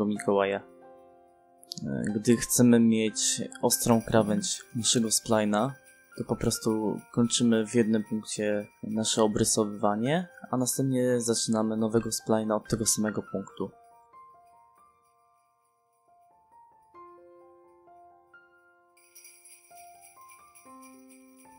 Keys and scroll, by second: 9.1 space, 16.5 c, 16.8 space.